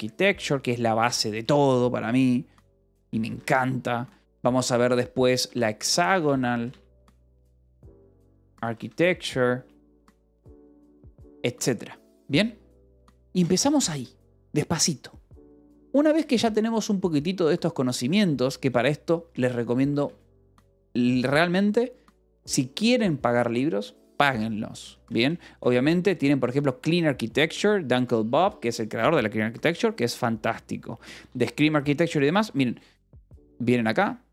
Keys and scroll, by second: 0.0-4.6 typing, 5.7-11.3 typing, 16.1 shift+;, 16.3 space, 17.8 Escape, 18.3 k, 19.8 a, 20.0 space, 25.1 space, 31.6 BackSpace, 32.2 Escape.